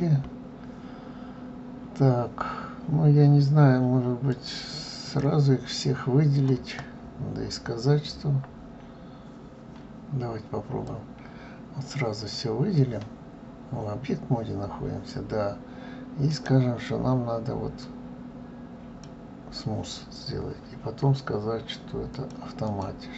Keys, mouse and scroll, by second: 4.1 click, 4.8 click, 5.3-6.8 scroll down 5, 10.6 click, 18.8 right click, 21.9 click, 22.4 click.